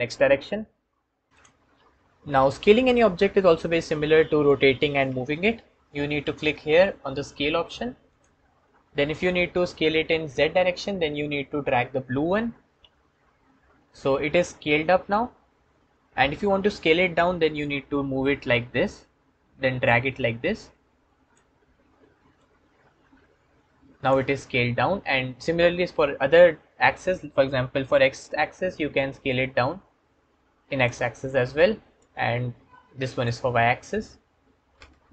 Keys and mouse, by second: 7.9 click, 12.2 click, 17.6 click, 17.8 click, 22.3 click, 29.1 middle click, 31.8 middle click, 34.4-35.1 alt+middle drag.